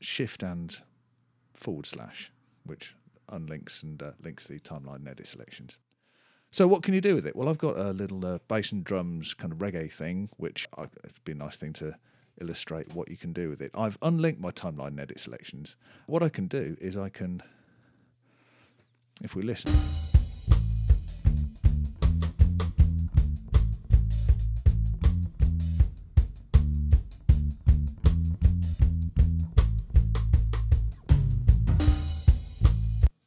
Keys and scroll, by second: 17.2 super+], 19.5 super+space, 30.7 super+[, 32.9 space.